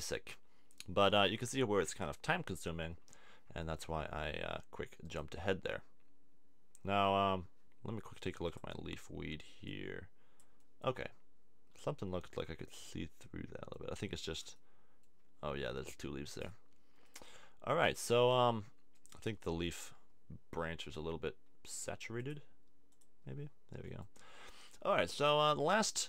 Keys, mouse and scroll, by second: 18.9 click, 20.9-22.7 drag, 23.9 click.